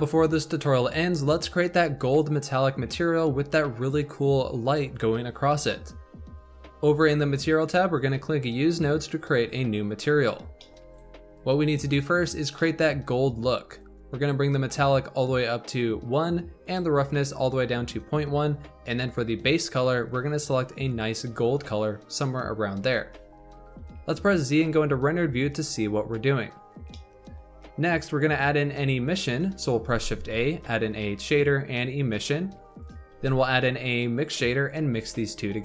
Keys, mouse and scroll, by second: 7.9 click, 9.0-10.0 scroll up 9, 10.0 click, 10.3 scroll down 4, 10.5 middle click, 10.7 scroll up 1, 10.8 click, 12.1 scroll up 4, 12.5-13.7 middle drag, 13.7-19.4 drag, 23.9 z, 25.3-26.6 scroll up 1, 26.6 scroll down 2, 26.8-27.9 middle drag, 27.9 click, 28.3 click, 29.6 middle click, 29.8 shift+a, 33.1 shift+a.